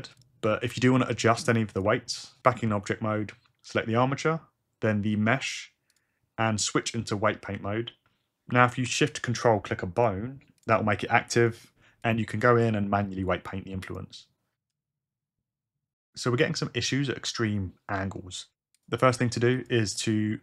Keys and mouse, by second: 0.2 click, 1.8 r, 2.6 Tab, 5.9 shift+click, 6.9 Tab, 9.4 ctrl+shift+click, 10.6 ctrl+shift+click, 11.4 ctrl+shift+click, 12.0 click, 16.5 r, 19.5 click, 20.0 Tab.